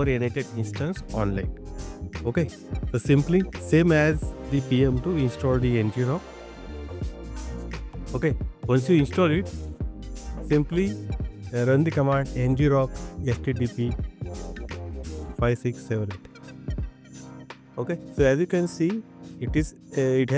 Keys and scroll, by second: 8.2 BackSpace.